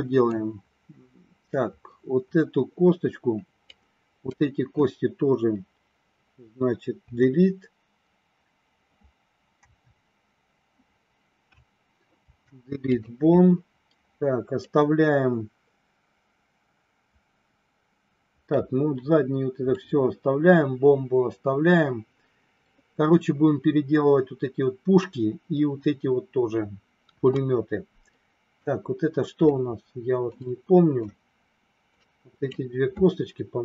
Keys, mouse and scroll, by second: 3.8 click, 6.9 Delete, 9.5 Delete, 12.2 Delete, 14.6-18.5 middle drag, 19.8-22.6 middle drag, 27.0 KP_1, 29.4-31.0 middle drag, 32.0 click.